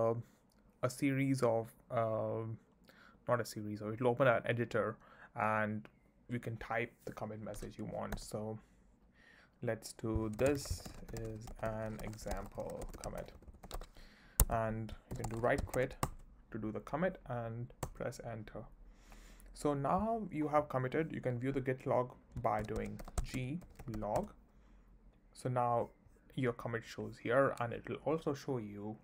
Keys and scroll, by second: 8.2 i, 10.1-16.2 typing, 14.4 Escape, 17.8 Return, 22.6-24.5 typing.